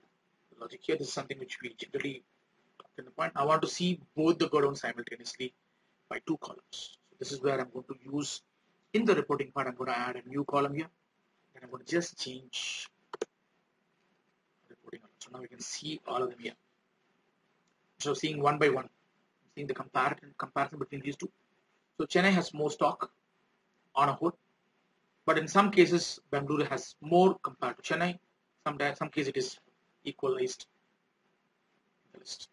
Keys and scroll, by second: 14.3 ctrl+a.